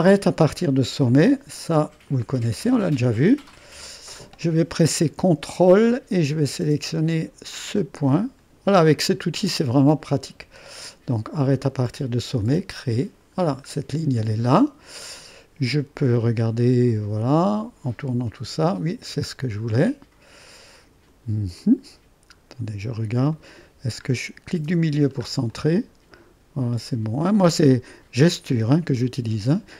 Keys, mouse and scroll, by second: 2.7 click, 2.8 middle click, 3.1-6.0 drag, 4.0 middle click, 4.7 middle click, 5.6 middle click, 8.5 click, 12.4-13.5 drag, 13.5-14.3 scroll down 1, 15.7 click, 17.7-19.4 drag, 19.4-19.9 scroll down 1, 19.9 click, 21.2 click, 21.6 middle click, 22.4-23.4 scroll up 1, 23.4-24.9 middle drag, 25.6 click, 25.8-27.4 middle drag, 29.2 click.